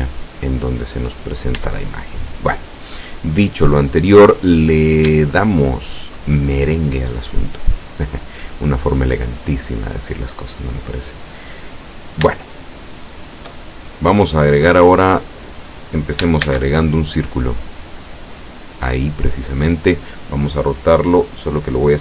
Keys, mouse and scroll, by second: 1.0 right click, 1.6 Tab, 5.4-6.5 shift+middle drag, 11.6 scroll down 2, 12.4-13.7 shift+middle drag, 13.7-14.0 shift+scroll up 1, 16.5 shift+a, 18.5 click.